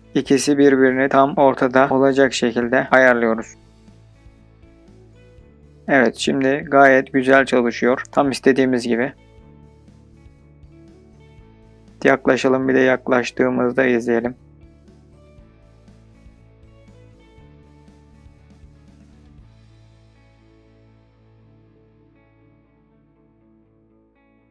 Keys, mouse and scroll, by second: 0.7-1.3 scroll down 1, 1.3-3.5 middle drag, 3.5 click, 3.6 space, 12.0 space, 12.1-12.5 scroll up 3, 12.5 middle drag, 12.8-13.4 scroll down 3, 13.1-13.4 middle drag, 13.4-13.7 scroll up 2, 14.3-15.9 shift+middle drag, 16.3 space.